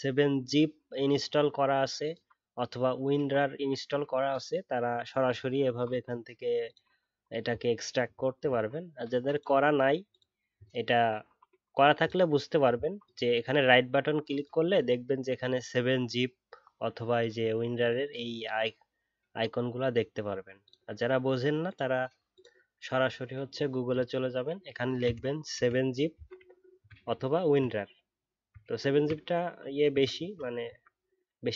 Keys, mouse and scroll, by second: 28.9 ctrl+a.